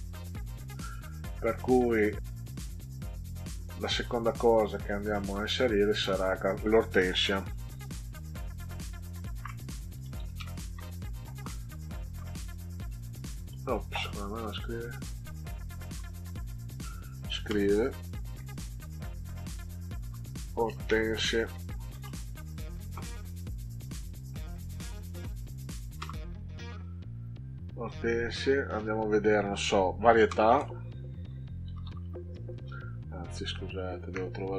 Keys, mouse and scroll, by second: 3.5-4.6 scroll up 6, 9.3-11.2 typing, 11.4 Delete, 11.6 Delete, 12.8 o, 14.6 click, 15.9 o, 17.5 BackSpace, 17.8 Tab, 18.5 BackSpace, 18.8 Caps_Lock, 19.7-22.8 typing, 25.9 Return, 30.4-32.9 typing, 34.1 Caps_Lock.